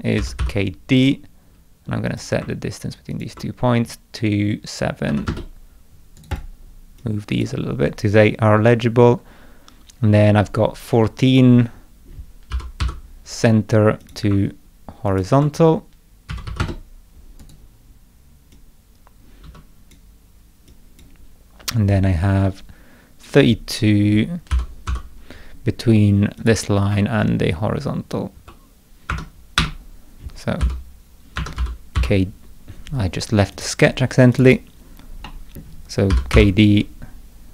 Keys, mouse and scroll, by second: 0.0-0.9 typing, 2.1 click, 3.1 ctrl+click, 6.2 right click, 6.3 click, 7.0-7.4 drag, 8.7 middle click, 12.5 k, 12.8 d, 14.0 click, 15.1 ctrl+click, 17.4 right click, 18.5-19.9 drag, 19.5 Escape, 20.7-21.0 drag, 24.5 l, 24.9 d, 26.4 click, 29.1 Escape, 29.6 Escape, 30.6 l, 31.4 Escape, 31.6 k, 32.0 d, 33.5 click, 34.3 click, 34.5 click, 35.3 middle click, 35.9-36.8 typing.